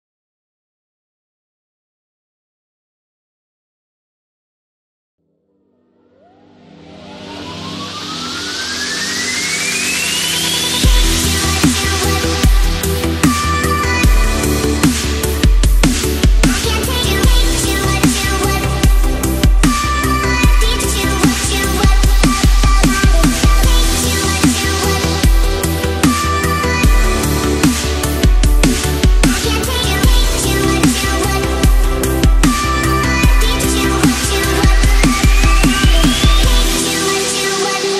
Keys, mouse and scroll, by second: 1.5 click, 2.7-3.3 space, 3.7 click, 4.4 shift+click, 5.8 click, 11.4-12.0 click, 12.2 ctrl+z, 13.4-14.1 drag, 15.6 drag, 20.1-21.0 drag, 21.5 ctrl+z, 24.5-26.7 drag, 29.2-30.1 drag, 30.8 ctrl+z, 31.4-32.8 drag, 34.8-35.3 drag.